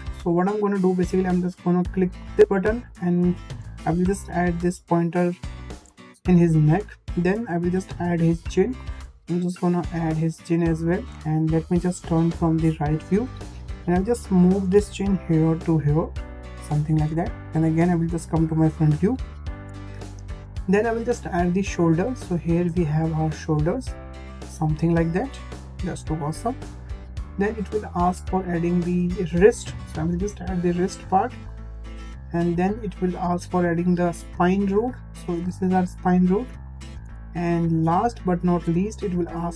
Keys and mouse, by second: 2.1-5.8 drag, 8.7-10.9 drag, 11.7 `, 14.7 g, 17.0 `, 19.1-19.4 shift+middle drag, 20.0-20.3 shift+middle drag, 21.6-26.3 drag, 27.9-28.2 shift+middle drag, 28.9-31.5 drag, 32.6-33.0 shift+middle drag, 34.3-36.7 drag, 37.3 shift+middle click, 39.0-39.5 drag.